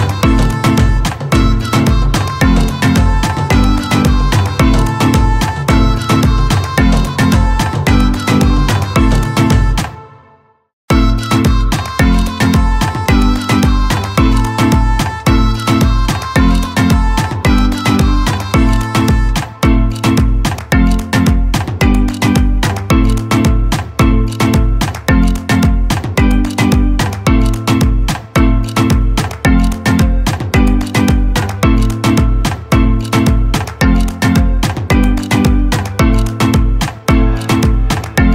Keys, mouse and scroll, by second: 1.8 Up, 2.9 click, 3.8-4.5 alt+scroll down 1, 6.0 ctrl+click, 6.6 ctrl+space, 6.9-11.5 ctrl+drag, 11.5 alt+scroll down 1, 12.8 ctrl+space, 12.9 ctrl+click, 13.4 ctrl+space, 13.9 click, 21.2 click, 21.3 Caps_Lock, 24.0 right click, 26.1 click.